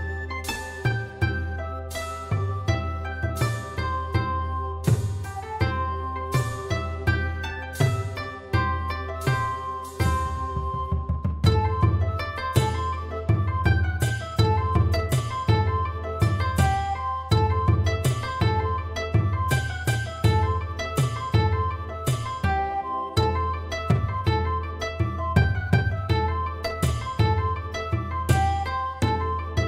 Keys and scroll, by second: 2.6-4.0 typing.